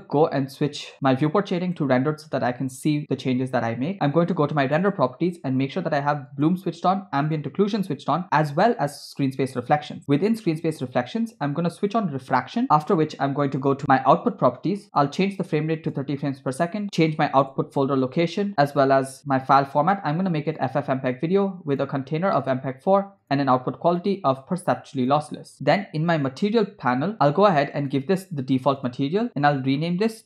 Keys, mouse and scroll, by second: 2.6 click, 4.7 click, 6.5 click, 7.5 click, 9.2 click, 10.3 click, 12.3 click, 13.8 click, 15.0-16.1 drag, 16.6 click, 17.4 /, 18.4 scroll down 3, 18.5 click, 20.0 scroll down 1, 20.6 click, 20.9-21.6 scroll down 2, 21.7-22.8 drag, 24.0-25.3 drag, 26.3 click, 27.9-29.2 drag, 29.4-30.2 drag.